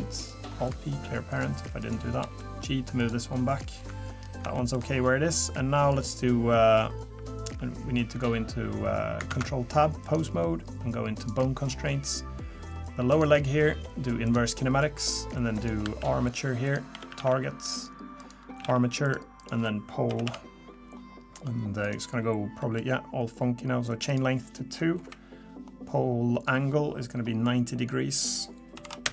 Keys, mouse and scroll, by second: 0.2 click, 0.6 alt+p, 1.8 click, 2.2 g, 3.5 click, 4.2 scroll up 3, 4.5 shift+middle click, 5.9 click, 9.3 ctrl+Tab, 12.3 click, 13.1 click, 15.5 click, 16.6 click, 18.2 click, 19.4 click, 22.6 middle click, 24.0 click, 24.1 click, 25.0 KP_3, 26.4 click, 27.8 click.